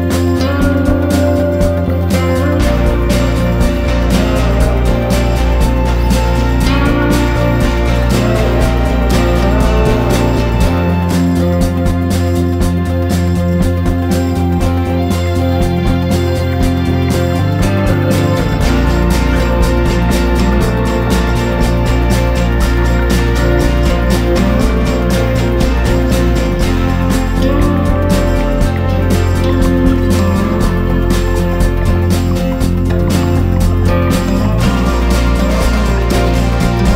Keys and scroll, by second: 0.3 ctrl+-, 1.2 BackSpace, 1.8 m, 2.1 ctrl+s, 3.6 ctrl+=, 7.1 ctrl+=, 15.0 ctrl+-, 16.2 BackSpace, 16.5 m, 16.8 ctrl+=, 16.9 ctrl+-, 17.6 ctrl+-, 18.0-18.5 ctrl+=, 18.7 i, 21.5 ctrl+=, 31.0 BackSpace, 36.4 ctrl+=.